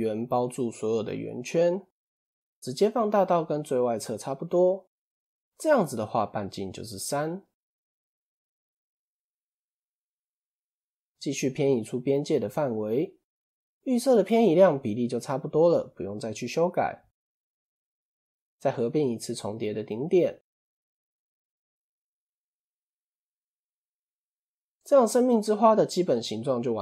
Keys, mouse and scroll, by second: 1.7-4.7 drag, 6.2-7.8 drag, 9.9 ctrl+e, 15.0 scroll up 1, 16.4-17.0 scroll down 1, 17.0 click, 17.6 a, 18.7 alt+m, 20.4 click, 22.3-24.2 scroll down 1, 24.2 Tab.